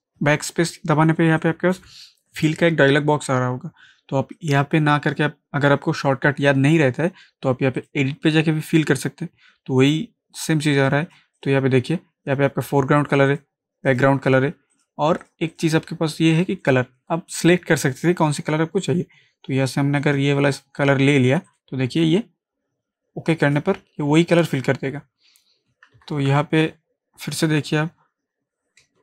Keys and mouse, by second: 1.4-4.3 drag, 7.8 click.